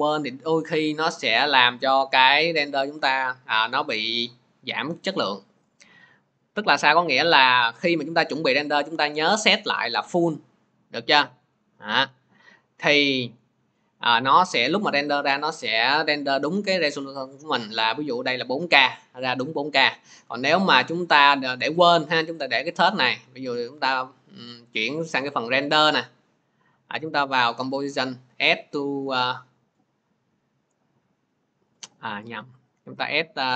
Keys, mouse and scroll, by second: 9.2 click, 10.0 click, 12.8 click, 20.8 click, 21.8 click, 28.8 click, 31.6 click, 32.5 click.